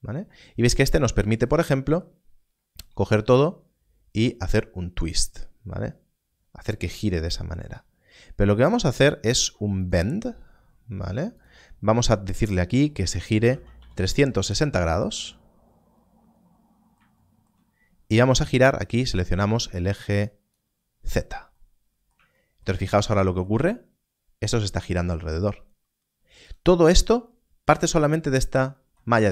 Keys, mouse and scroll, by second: 3.2 click, 9.7 click, 13.4 click, 14.3 Return, 18.9 click, 26.4 click, 26.8 Tab, 28.0-28.5 scroll up 1.